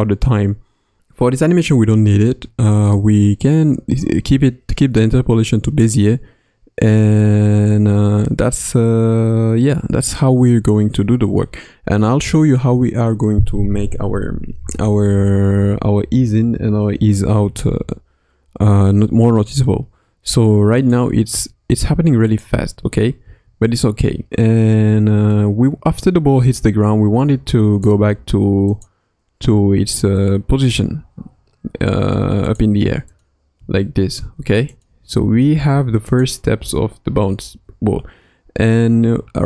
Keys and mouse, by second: 20.8 click, 21.4 space, 21.8 space, 22.2 click, 22.9 space, 23.2 space, 25.3-27.8 drag, 28.6 click, 30.7 shift+d, 33.2 click, 33.5-37.1 typing, 34.8 click, 36.2 click.